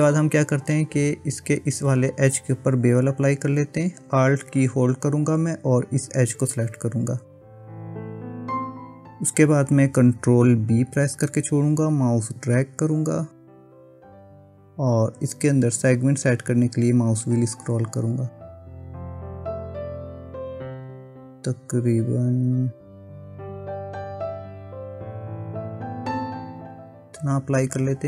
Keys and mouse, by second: 5.9 alt+click, 7.7 middle click, 11.0 ctrl+b.